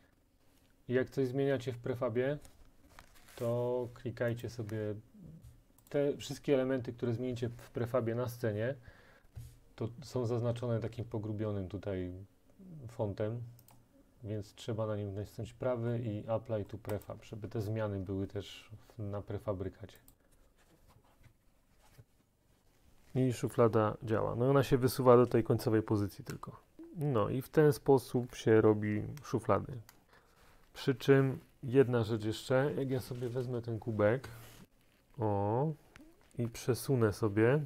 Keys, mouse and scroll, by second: 4.5 right click, 6.0 click, 13.8 right click, 17.1 click, 20.2 click.